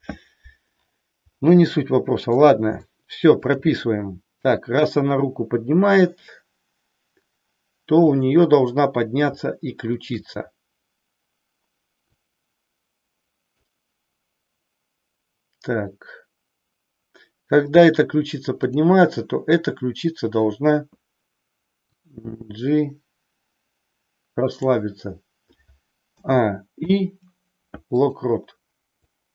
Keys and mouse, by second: 1.7 middle click, 2.8 shift+middle click, 10.0-11.2 shift+drag, 12.2-13.6 drag, 21.8-24.6 drag, 26.1 a, 26.7 i, 29.1-29.3 drag.